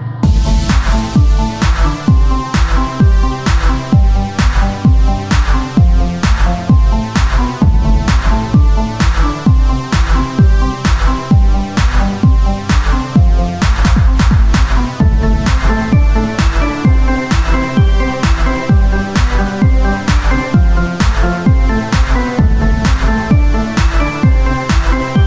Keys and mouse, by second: 2.2 e, 3.6 z, 3.8 Tab, 4.8 KP_1, 5.3 z, 16.3 Tab, 17.7 z, 19.6 o, 19.9 s.